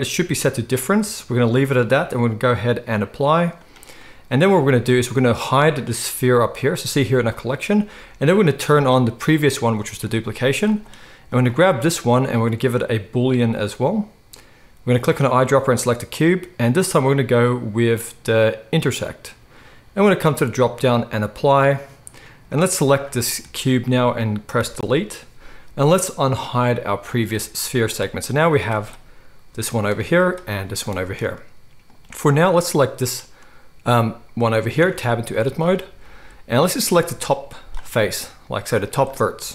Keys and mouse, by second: 0.9 click, 0.9-2.0 middle drag, 2.0-7.4 drag, 7.4-9.2 middle drag, 9.2 click, 9.3-11.4 middle drag, 10.4 z, 11.4 click, 11.5 middle click, 12.4 click, 12.5 middle click, 12.8-15.0 drag, 15.0-18.8 middle drag, 18.8 click, 18.9-20.3 middle drag, 20.3-22.7 drag, 22.7-27.1 middle drag, 24.6 Delete, 27.1 click, 27.2-30.1 middle drag, 27.6 z, 29.4 g, 30.1 click, 30.2-32.6 middle drag, 30.3 g, 32.6 click, 32.7-36.9 middle drag, 34.8 Tab, 35.3 z, 36.9-39.5 drag.